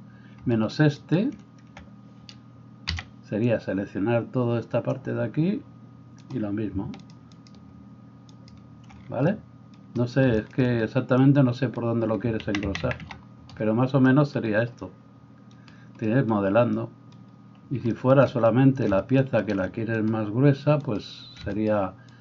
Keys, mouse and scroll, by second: 1.0 shift+right click, 1.2-7.0 shift+middle drag, 2.9 c, 7.0-8.5 shift+right drag, 8.5-20.0 shift+middle drag, 12.6 ctrl+z, 12.8 ctrl+z, 20.0-21.0 right drag, 21.0-22.1 middle drag, 22.1 shift+right click.